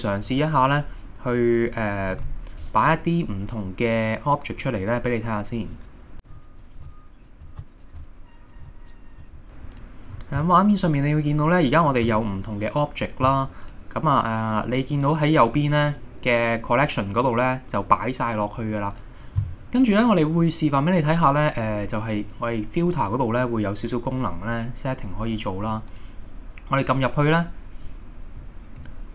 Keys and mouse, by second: 2.2 shift+a, 6.2-9.3 typing, 6.5 click, 7.7 click, 8.8 right click, 9.4 click, 11.5 middle click, 12.1 middle click, 14.1 click, 25.9-29.0 drag.